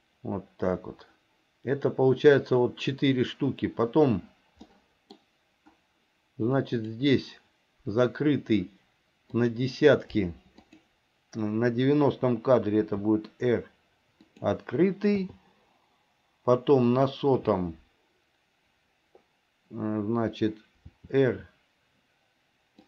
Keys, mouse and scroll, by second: 4.8 middle click, 6.9 click, 9.5 click, 10.7 click, 13.0 r, 15.3 i, 17.0 click, 21.0 r.